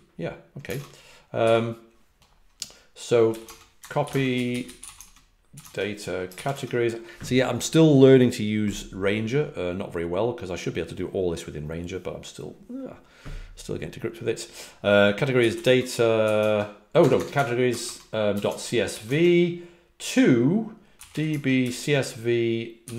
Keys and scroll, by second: 2.9-5.5 typing, 15.2-17.3 typing, 17.6 Tab, 17.7 Tab, 18.3 ., 18.4 Tab, 18.8 c, 19.0 Tab, 20.6-22.9 typing.